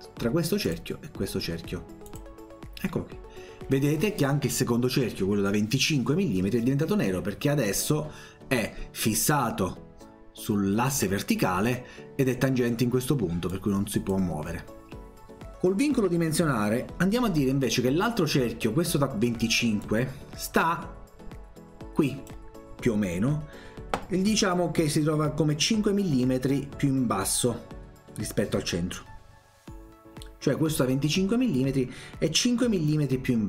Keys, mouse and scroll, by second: 0.7 click, 2.1 click, 11.0 Escape, 13.5 click, 19.8-22.3 drag.